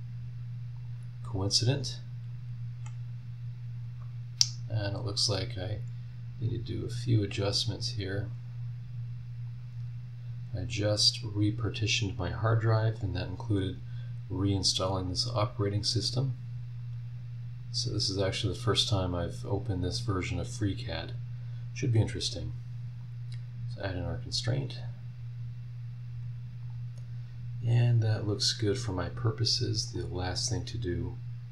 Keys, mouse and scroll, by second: 0.7 click, 1.0-4.7 middle drag, 6.5-8.5 drag, 9.5-11.3 drag, 11.3-12.9 middle drag, 12.9-14.9 drag, 16.8-17.8 drag, 18.5 click, 19.6-20.8 drag, 20.8-23.7 middle drag, 23.7 click, 24.3 scroll down 2, 24.9-25.6 scroll down 4, 25.8 scroll up 2, 26.6 click, 28.1 scroll down 2, 28.5 scroll up 2, 29.9 click, 30.2 scroll down 2, 30.6 scroll up 2.